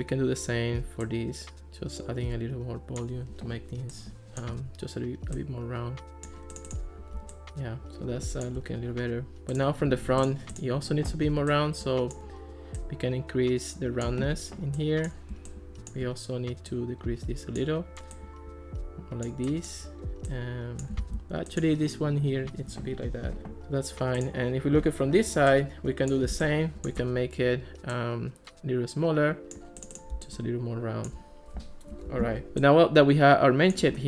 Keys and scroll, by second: 21.0 super+z, 32.3 alt+r.